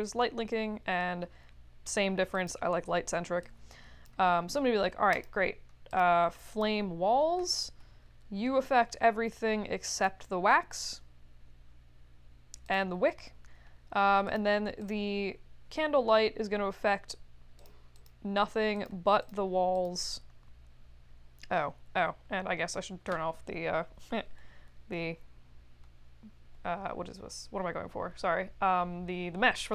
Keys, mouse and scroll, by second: 2.3 click, 3.4 click, 5.1 click, 5.9 click, 6.5 click, 9.9 click, 12.6 click, 14.2 click, 14.8 click, 17.5 click, 17.9 click, 18.7 click, 19.2 click, 19.7 click.